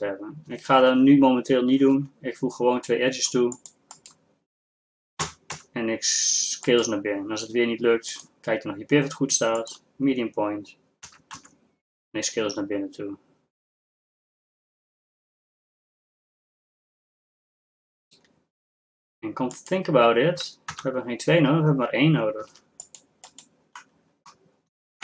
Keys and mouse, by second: 1.9 ctrl+r, 5.4 s, 8.1-11.2 drag, 11.2 s, 20.8 ctrl+z, 22.5 ctrl+r.